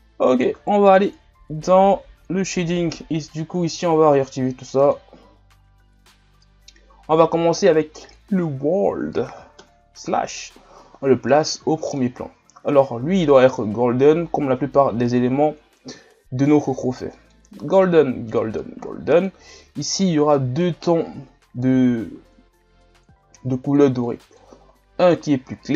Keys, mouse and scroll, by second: 0.6-2.0 right drag, 4.4-6.7 drag, 6.7-8.1 scroll up 2, 8.1-19.7 drag, 19.7-23.8 middle drag, 23.8-25.7 drag.